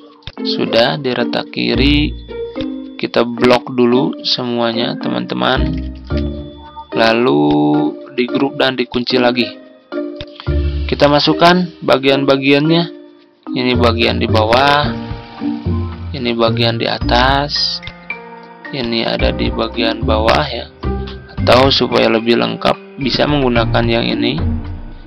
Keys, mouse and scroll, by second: 0.7-4.6 drag, 5.8 ctrl+g, 7.3-20.7 drag, 21.5 Delete, 23.0 click.